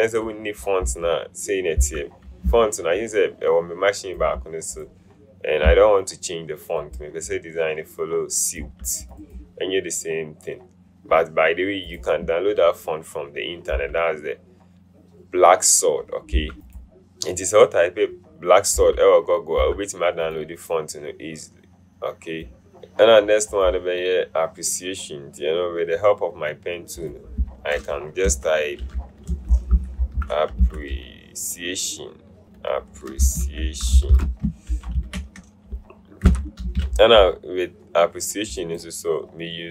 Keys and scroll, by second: 28.4 Caps_Lock, 29.2-31.2 typing, 33.2-35.0 typing, 36.4 BackSpace, 36.7 a.